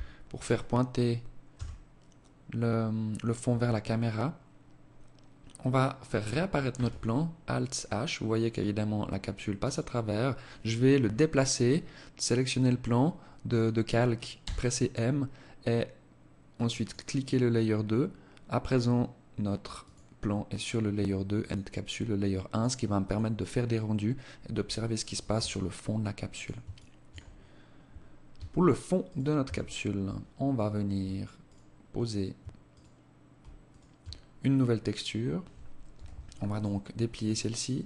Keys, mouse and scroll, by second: 0.5 KP_0, 5.7 alt+h, 8.7 right click, 13.5 m, 18.8 click, 20.4 click, 21.5 click, 22.1 click, 24.5 alt+click, 25.8 alt+shift+click, 26.3-26.7 scroll up 5, 26.9 scroll down 2, 27.4 Tab, 28.1 right click, 28.5 Tab, 28.9 scroll up 3, 30.5 alt+right click, 31.7 alt+shift+right click, 32.7 shift+right click, 33.6 scroll down 2, 34.9 u, 37.1 click.